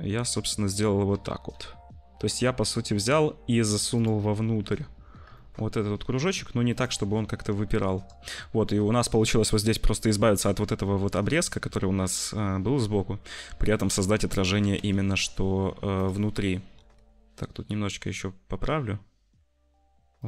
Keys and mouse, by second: 1.0 g, 4.0 middle click, 5.3 shift+middle click, 5.7 g, 7.1 `, 10.7 shift+middle click, 14.5 g, 16.7 r.